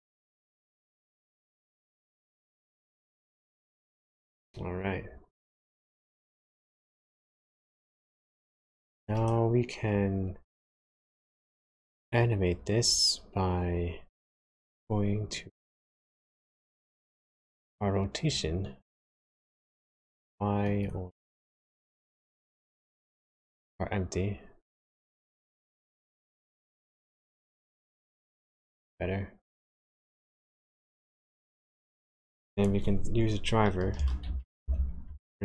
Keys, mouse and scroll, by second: 6.2 click, 13.7 n, 16.3 click, 19.0 click, 21.4 click, 23.5 click, 24.9 click, 26.6 click, 31.8 click.